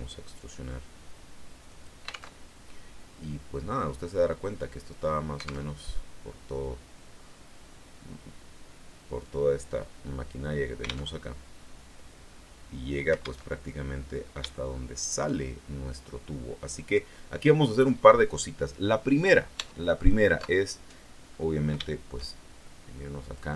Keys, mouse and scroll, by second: 1.6 click, 2.3 alt+Tab, 5.6 alt+Tab, 9.1-10.4 drag, 11.0 alt+Tab, 13.3 alt+Tab, 14.4 shift+click, 19.5 Tab, 19.9 right click, 20.3 Tab, 21.2-21.6 scroll up 1, 23.1 click.